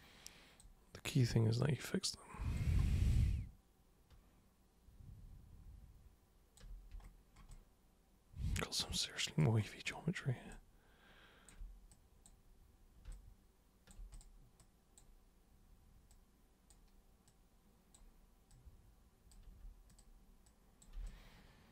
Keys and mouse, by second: 1.5 super+click, 2.1 super+click, 3.2-6.6 alt+super+drag, 7.5-9.4 alt+super+drag, 10.5 alt+super+click, 11.9 super+click, 13.1-13.9 alt+super+drag, 14.1 super+drag, 14.6-15.0 super+drag, 16.1 super+click, 17.3-18.0 super+drag, 18.5 super+click, 19.9 super+click, 20.5 super+click, 21.1-21.7 alt+super+drag.